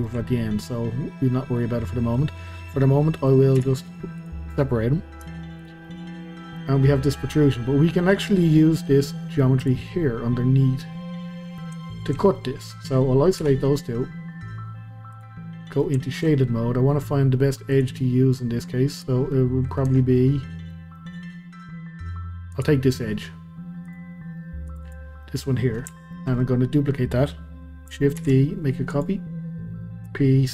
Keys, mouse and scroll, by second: 3.6 p, 5.2 Tab, 5.6 click, 5.8-8.6 middle drag, 8.6 scroll up 1, 8.9-9.6 middle drag, 9.6 click, 9.9-11.9 middle drag, 11.9 shift+click, 12.3-13.4 middle drag, 13.4 KP_Divide, 15.1 click, 15.6-17.1 middle drag, 17.1-17.7 scroll up 2, 17.7 click, 18.0-18.9 middle drag, 18.9 click, 19.3-19.9 middle drag, 19.9 Tab, 20.1 scroll down 2, 20.2-22.5 middle drag, 22.5 click, 23.8-24.9 drag, 25.2-26.3 middle drag, 26.3-28.2 scroll down 1, 28.2 shift+d, 30.1 p.